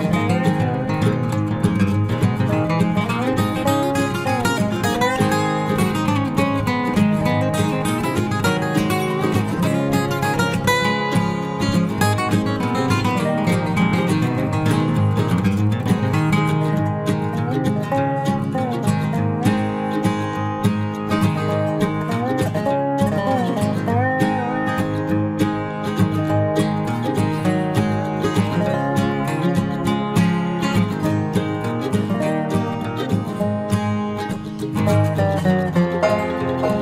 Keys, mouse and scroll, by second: 3.6 ctrl+r, 7.1-8.2 middle drag, 8.4-10.1 middle drag, 10.1-15.5 right drag, 11.3-16.1 drag, 15.8-18.0 right drag, 16.4-18.3 drag, 18.3-24.0 middle drag, 24.0 ctrl+r, 26.1 ctrl+r, 28.7 click, 29.9 ctrl+s, 34.5 ctrl+r, 36.0 ctrl+r.